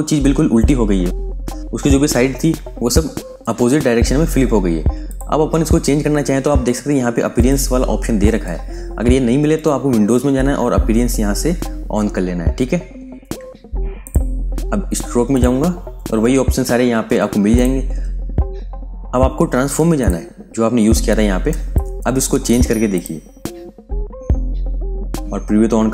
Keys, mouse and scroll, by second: 5.0 click, 13.9 click, 23.7 scroll up 1, 23.8 scroll down 1, 25.8 click.